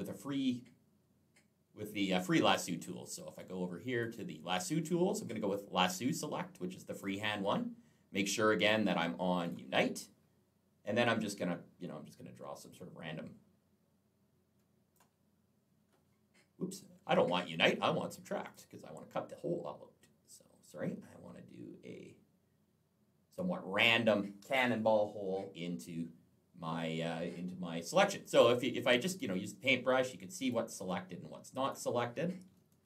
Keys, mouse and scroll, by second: 3.2 click, 6.8 click, 9.3 click, 10.7 click, 18.2 click, 19.2 click, 28.7 click, 29.5 click, 30.7 click, 32.7 ctrl+z.